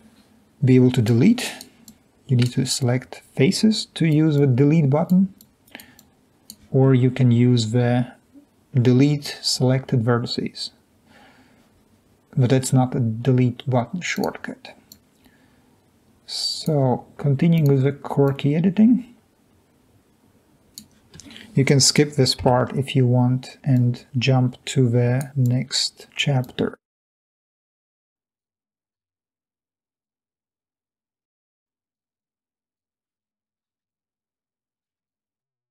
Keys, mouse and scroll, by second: 0.2 Delete, 2.6-3.0 drag, 3.5 drag, 6.2-6.6 drag, 23.3 Delete, 24.9-26.4 drag, 30.2 Delete, 30.6 click, 33.9 Delete, 34.2 click.